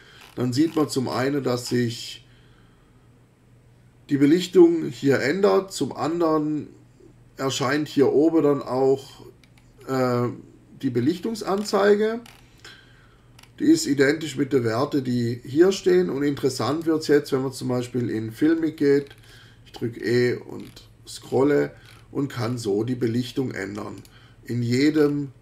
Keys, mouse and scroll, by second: 0.2-1.4 scroll up 6, 1.6 scroll up 2, 1.8 scroll down 1, 9.1 e, 9.4-10.2 scroll down 4, 10.9-11.4 scroll down 2, 11.5-12.6 scroll up 4, 13.4 scroll up 2, 16.7 click, 18.4 e, 19.0-19.5 scroll down 1, 20.0-22.8 scroll down 10, 24.0 click, 24.7 e, 25.0 scroll up 2, 25.2 scroll down 2.